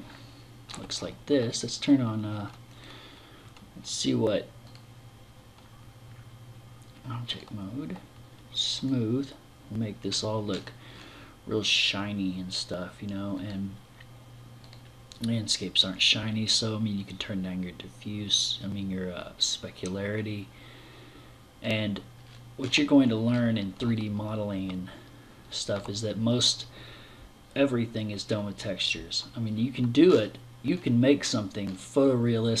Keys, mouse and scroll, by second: 2.5 right click, 4.2 e, 8.2 click, 9.5-10.1 scroll up 5, 10.4-11.2 scroll down 1, 11.2-11.9 scroll down 1, 12.8 click, 14.1 click, 16.4 click, 21.6-22.7 scroll down 7, 22.7-23.4 scroll up 4, 23.4 middle click, 29.5 scroll up 4, 30.1 scroll down 5, 30.6-31.4 scroll up 4.